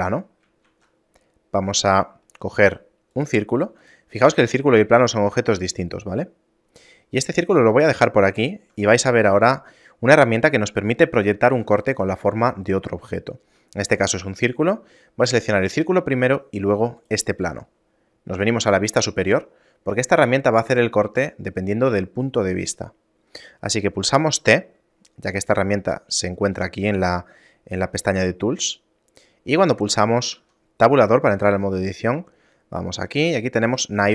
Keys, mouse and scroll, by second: 0.8 shift+a, 3.9 right click, 4.5 right click, 5.0 g, 8.2 shift+middle click, 9.4 right click, 10.2 shift+middle click, 12.0 right click, 13.4 shift+middle click, 17.1 shift+right click, 18.5 KP_7, 19.6 scroll down 3, 19.9 middle click, 21.2 scroll up 1, 21.9 scroll up 2, 22.9 middle click, 24.5 t, 25.8 middle click, 30.5 Tab, 32.1 middle click.